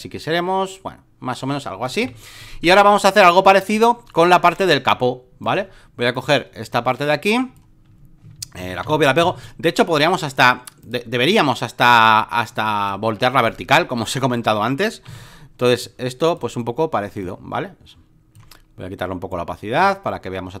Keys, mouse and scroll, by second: 2.0 v, 2.7 alt+middle click, 3.3 alt+middle click, 5.4-8.2 drag, 8.8 ctrl+v, 9.4-14.5 drag, 15.1 ctrl+t, 15.8 ctrl+click, 19.3-20.6 drag.